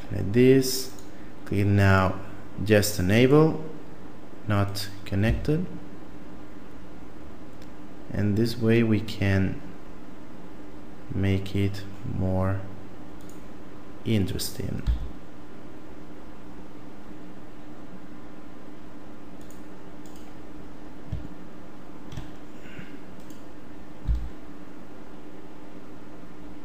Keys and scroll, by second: 5.2 s, 14.8 s, 24.1 s.